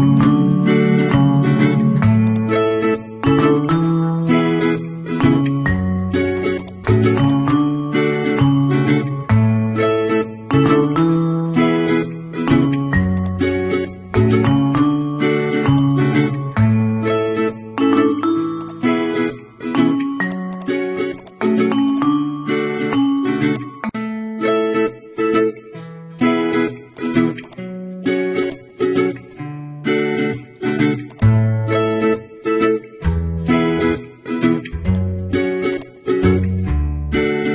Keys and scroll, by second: 29.5 ctrl+a.